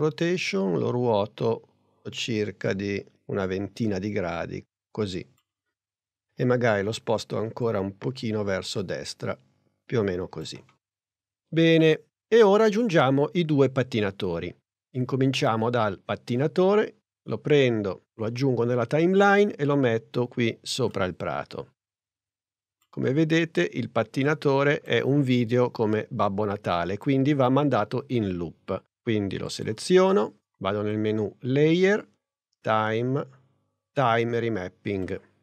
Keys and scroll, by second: 6.4 p.